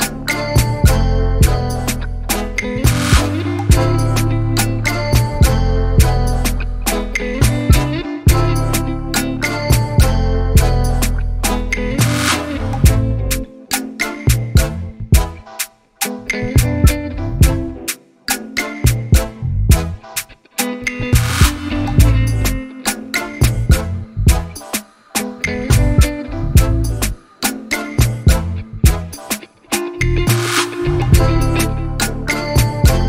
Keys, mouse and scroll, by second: 0.0 z, 0.5 s, 3.8 Tab, 4.9 Tab, 6.3 alt+click, 8.7 s, 10.5 alt+click, 11.1 s, 15.6 click, 16.1 s, 19.1 alt+click, 19.6 s, 22.8 alt+click, 23.3 s, 26.2 Tab, 27.3 click, 27.7 scroll down 4, 28.0 middle click, 28.6 scroll up 2, 28.8 click, 29.3-29.7 shift+middle drag, 29.7 click, 31.3 KP_Decimal, 32.4-33.0 scroll down 2.